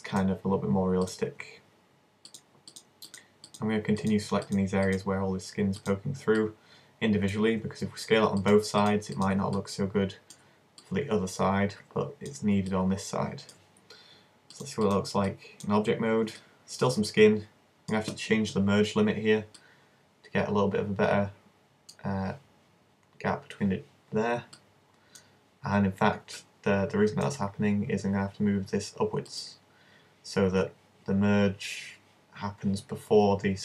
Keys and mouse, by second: 3.5-7.8 right drag, 8.4-10.0 right drag, 10.0 click, 10.7 right click, 10.8-14.3 middle drag, 12.7 click, 15.0 click, 15.3-18.7 middle drag, 19.6-21.5 drag, 24.6-28.2 drag, 29.3-32.3 drag.